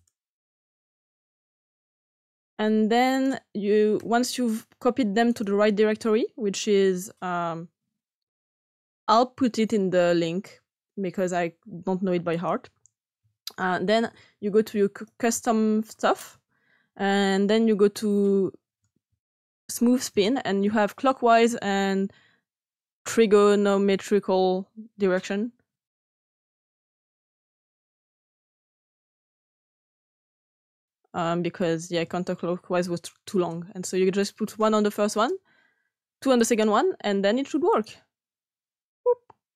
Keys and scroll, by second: 0.0 Right, 0.1 Right, 0.3 Right, 0.5 Right, 0.9 Right, 1.7 x, 3.9 s, 13.7 BackSpace, 13.8 BackSpace, 14.0 BackSpace.